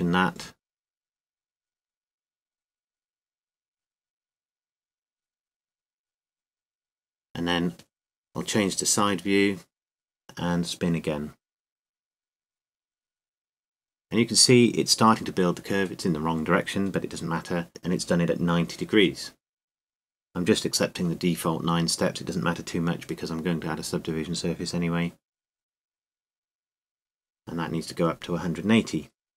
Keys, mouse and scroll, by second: 1.4 r, 3.9 g, 9.3 KP_3, 14.6-17.4 drag, 23.6-25.1 middle drag, 25.9 KP_3.